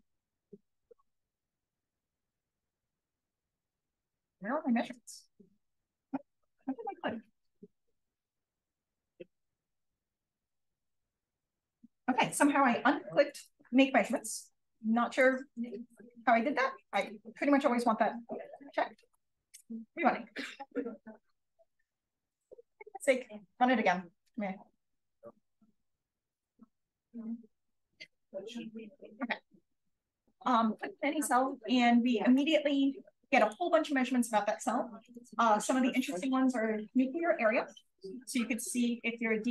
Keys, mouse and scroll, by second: 2.5 click, 6.4 click, 8.1-10.3 drag, 11.0 click, 13.2 click, 14.0 click, 14.8-17.2 drag, 18.4-19.6 drag, 30.2 Page_Down, 35.0 click, 38.2-39.5 drag.